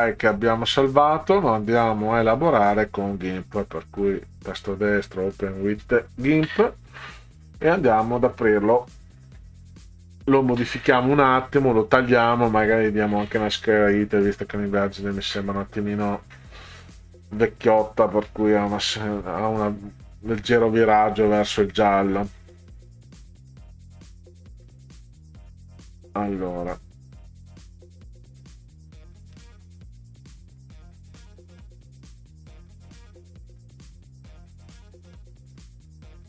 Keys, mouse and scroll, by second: 4.1 click.